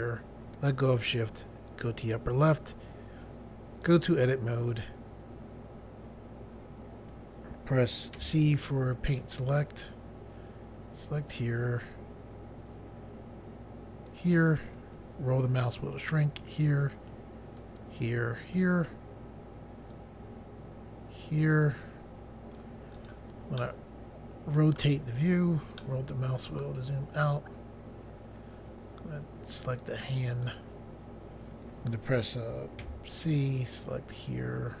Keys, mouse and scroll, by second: 1.7 click, 3.8 click, 8.2 c, 8.7 click, 14.1 click, 14.9-15.5 scroll up 1, 16.4 click, 17.6 click, 18.4 click, 19.9 click, 23.0 right click, 23.6 middle click, 25.2-25.8 scroll down 1, 25.8 middle click, 27.4 scroll up 1, 29.9 click, 32.8 c, 33.5 click.